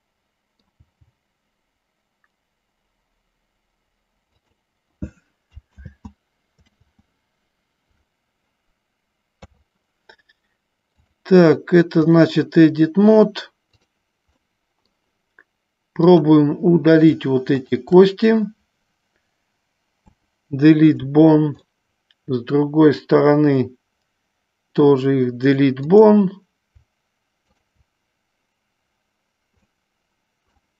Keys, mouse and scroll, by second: 1.0 g, 4.5 click, 6.2 ctrl+z, 7.3 ctrl+z, 9.6 KP_3, 11.2-12.5 drag, 14.6 middle click, 21.9-25.2 middle drag, 26.1 click, 27.7-28.8 shift+drag, 29.8 middle click.